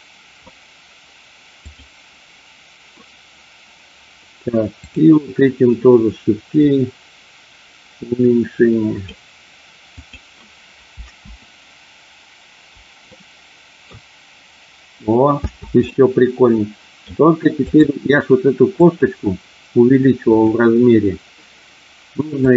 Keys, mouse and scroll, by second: 1.6 click, 4.6 click, 6.6-9.1 drag, 9.9 click, 10.9 space, 13.0 middle click, 15.4 space, 15.8-16.9 middle drag, 17.7 click, 18.8 click, 20.3 click, 22.4 click.